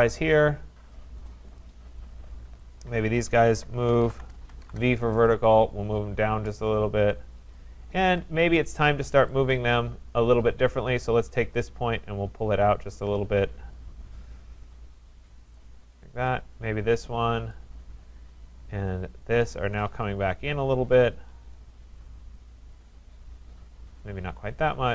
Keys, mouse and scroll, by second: 0.3 click, 0.9 click, 1.6 click, 2.6 click, 3.2-5.0 typing, 5.7 click, 6.4-7.1 typing, 7.4 click, 8.0 Escape, 9.3 click, 11.1 click, 15.5 click, 16.3 click, 17.5 click, 19.4 shift+click.